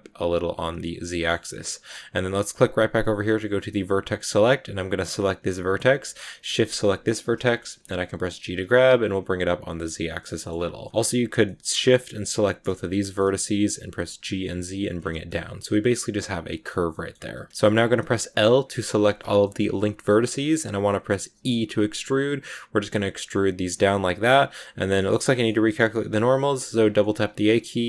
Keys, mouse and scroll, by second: 0.9-3.5 middle drag, 3.5 click, 4.8 right click, 6.7 shift+right click, 7.3 middle click, 8.2 g, 9.9 scroll down 5, 10.1 middle click, 10.4 scroll up 2, 10.7 middle click, 10.9 right click, 11.3 middle click, 12.1 shift+right click, 12.3 shift+middle click, 12.9 scroll up 1, 13.1 middle click, 13.7 g, 14.8 scroll down 1, 15.0-16.6 middle drag, 16.6-17.4 scroll up 2, 16.8 middle click, 17.4 a, 19.3 scroll up 1, 19.3-21.2 middle drag, 19.9 scroll up 1, 21.2 e, 23.6 scroll down 3, 23.8-25.4 middle drag, 25.4 a, 25.6 a, 26.9 middle click, 27.3 scroll up 2.